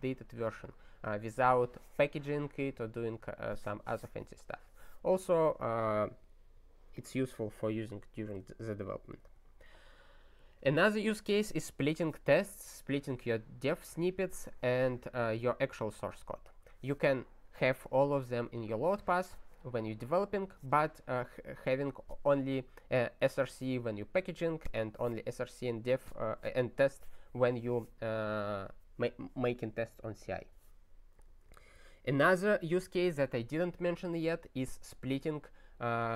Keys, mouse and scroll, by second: 6.9 click, 9.1 ctrl+n, 9.3 ctrl+n, 31.6 ctrl+n, 31.7 ctrl+n.